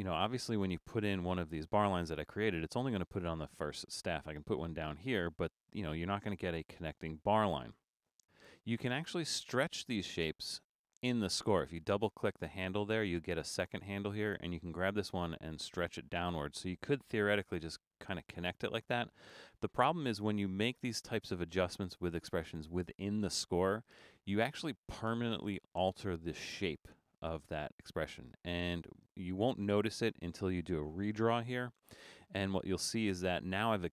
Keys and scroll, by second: 31.3 super+d.